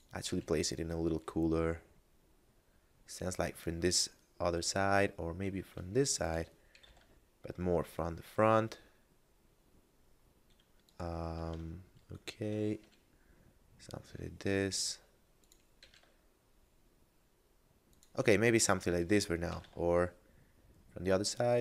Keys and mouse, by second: 0.3 r, 6.2 click, 6.7 r, 6.9 z, 10.9 click, 11.7 shift+middle click, 12.8 r, 15.4 click, 15.8 r, 17.9 click, 19.2 r, 19.6 z.